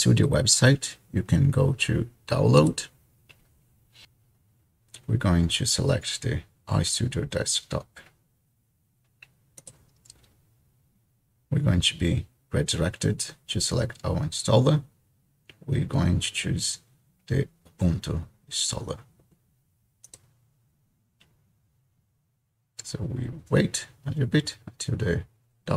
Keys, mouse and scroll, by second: 2.6-4.0 drag, 6.3-7.3 scroll down 2, 7.3-7.8 scroll down 1, 7.8-9.7 scroll down 1, 9.7-11.0 scroll down 1, 11.0 click, 14.5-15.2 scroll down 1, 15.3-16.3 scroll down 2, 16.3-17.6 scroll down 1, 17.6-18.6 scroll down 1, 18.6-20.3 scroll down 1, 20.3-21.9 drag.